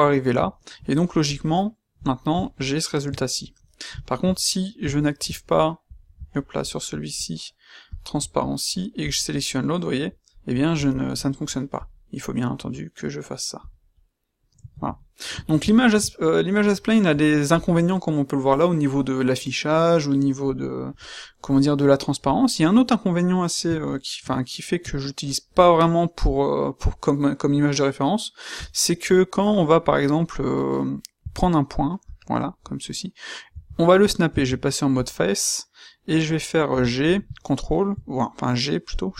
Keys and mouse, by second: 0.9-1.5 right drag, 3.3-4.8 middle drag, 4.9 middle click, 5.0-6.5 middle drag, 9.4 middle click, 9.5 middle click, 13.0 middle click, 13.2 middle click, 13.5-13.9 middle drag, 14.3-15.5 middle drag, 15.6 middle click, 15.9-17.2 middle drag, 17.4-21.7 middle drag, 21.9 middle click, 22.3 middle click, 24.9 middle click, 31.2 Tab, 34.2 shift+Tab, 36.6 g.